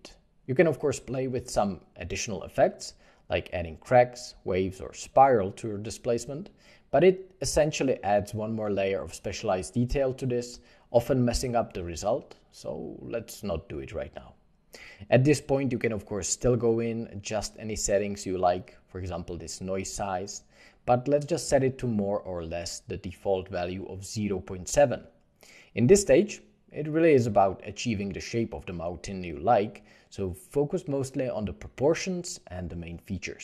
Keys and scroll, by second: 19.8 1, 19.9 Return, 21.8 ., 22.0 Return, 22.0 5, 23.8 7, 23.8 ., 24.5 8, 24.7 Return, 26.9 8.